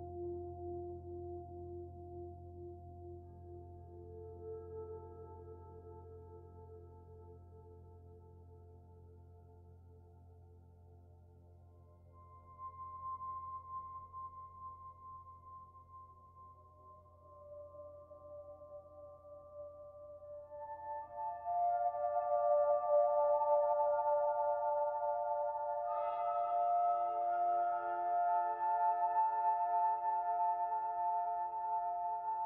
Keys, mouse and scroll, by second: 1.5 s, 3.4 click, 5.4 middle click, 7.2 KP_1, 8.0-9.0 scroll up 3, 9.0 shift+middle click, 10.7 s, 15.0 click, 16.3 middle click, 17.8 click, 18.8 Delete, 21.4 click, 22.6 alt+click, 23.0 middle click, 24.0 click, 26.5 middle click, 27.4 alt+click, 29.2 click, 30.1 click.